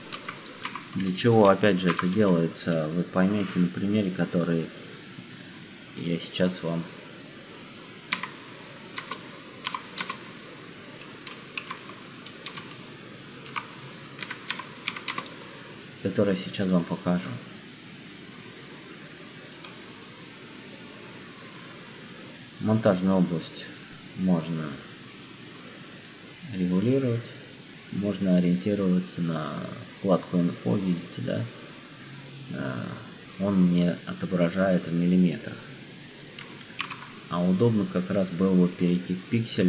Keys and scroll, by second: 0.1 shift+m, 0.5 o, 1.8 -, 7.9 1, 8.9 0, 9.7 8, 9.9 0, 11.5-15.4 typing, 36.8 ctrl+k.